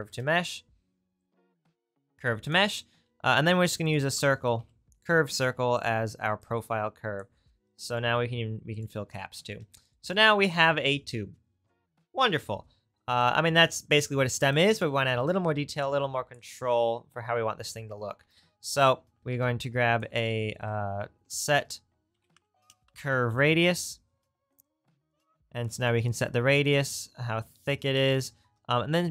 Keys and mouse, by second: 2.4 middle click, 6.5-8.8 drag, 13.2-14.5 drag, 18.2 shift+a, 19.2 Delete, 19.2-26.7 shift+right drag, 19.3 shift+a, 28.4 shift+a.